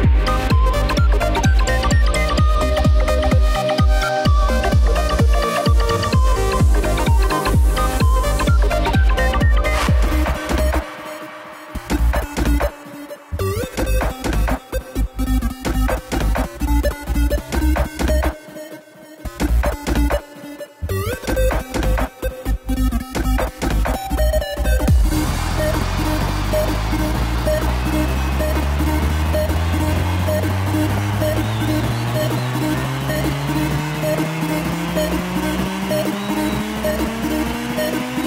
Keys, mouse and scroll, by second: 4.2 click, 5.8 space, 22.0 space, 23.2-26.8 drag, 34.4 g.